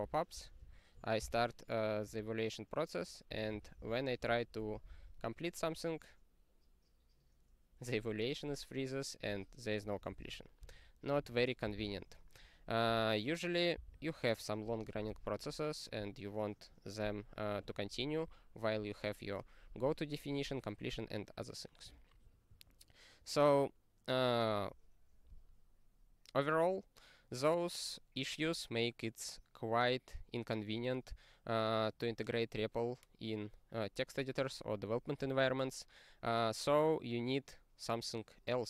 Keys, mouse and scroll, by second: 0.1 ctrl+g, 0.5 super+o, 1.2 Return, 2.0 Return, 2.1 super+o, 3.1-5.0 typing, 9.8 ctrl+a, 10.1 ctrl+n, 10.6 ctrl+w, 11.1 super+o, 12.6 ctrl+k, 22.0 n.